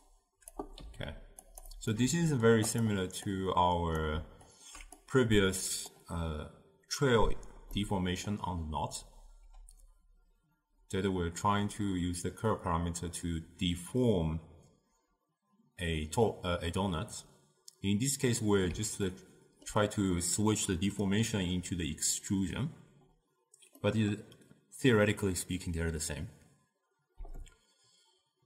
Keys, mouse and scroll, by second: 0.0 click, 0.8 g, 2.0 middle click, 2.7 click, 3.3 click, 4.5 alt+shift+click, 5.0-7.8 drag, 7.8-10.8 middle drag, 19.1-22.2 ctrl+middle drag, 23.8-26.8 middle drag.